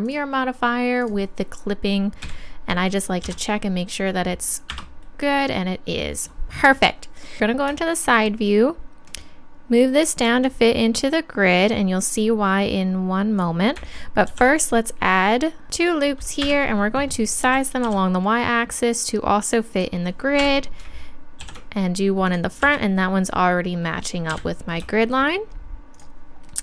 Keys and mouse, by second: 1.0-2.9 drag, 2.2 a, 3.2 g, 7.4 KP_3, 9.1-11.1 drag, 14.3 ctrl+r, 15.7 ctrl+z, 17.4 s, 19.8-21.0 drag, 20.4 KP_1, 21.4 ctrl+r, 24.3 KP_3, 26.0-26.6 drag.